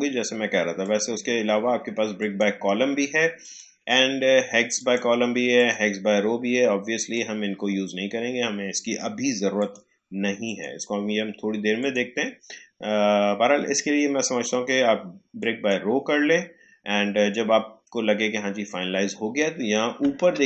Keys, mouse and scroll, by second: 9.5 click, 15.3 click.